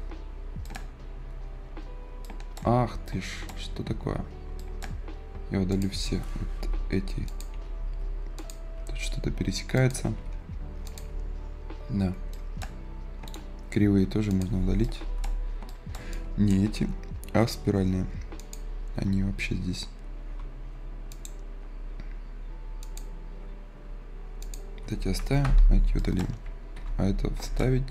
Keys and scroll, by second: 20.0 Delete.